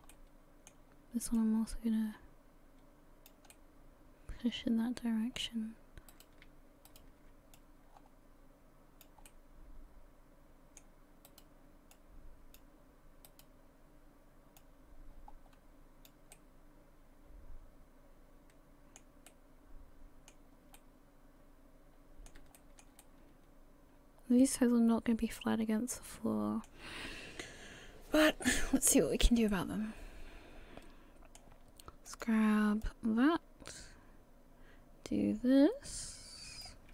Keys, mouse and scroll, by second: 0.1 middle click, 1.4 click, 3.5 middle click, 6.1 right click, 6.9 shift+right click, 7.5 click, 9.3 middle click, 11.3 right click, 11.9 click, 13.3 right click, 14.6 click, 16.3 middle click, 18.6 middle click, 19.3 middle click, 20.8-21.8 middle click, 21.6 middle click, 22.6 shift+middle click, 22.8 shift+middle click, 23.0 middle click, 27.4 KP_3, 29.5 middle click, 32.1 click, 32.8 click.